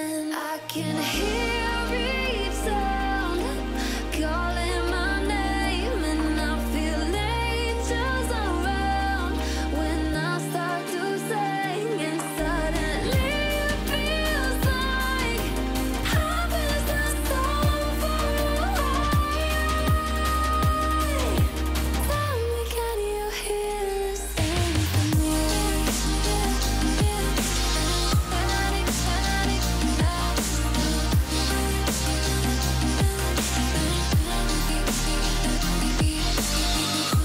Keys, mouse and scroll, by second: 1.1-3.0 drag, 7.5-8.8 alt+scroll down 1, 10.8 click, 15.0-15.4 alt+scroll down 1, 15.8-16.6 alt+scroll up 1, 17.9 click, 19.2-19.6 alt+scroll up 2, 20.1 click, 22.0-22.3 alt+scroll up 2, 23.1-28.3 drag, 25.0-28.3 drag, 29.8 alt+scroll down 1, 30.0 alt+scroll up 1, 31.6 alt+scroll down 1, 31.8 alt+scroll up 1, 32.1 click, 32.5-32.9 click, 33.4 alt+scroll up 1, 34.0 drag, 35.7-36.2 click, 36.5 alt+scroll up 1, 36.7 click.